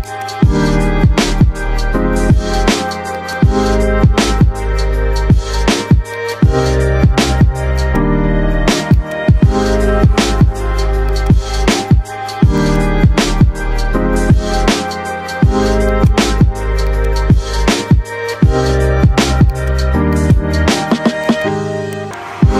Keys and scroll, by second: 5.2 k, 7.9 c, 19.6 Delete, 20.4 shift+F2, 20.7 Escape.